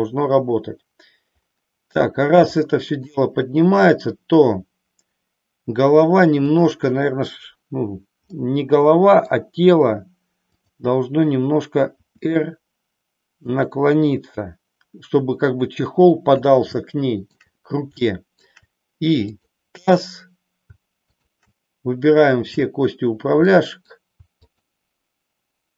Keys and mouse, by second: 2.6 shift+middle click, 6.5 click, 8.3 middle click, 10.5-11.6 drag, 12.1 r, 13.6 click, 16.7 shift+middle click, 18.0 shift+middle click, 19.2-20.2 drag, 21.1-22.2 shift+drag, 23.5 middle click, 24.5-25.6 shift+drag.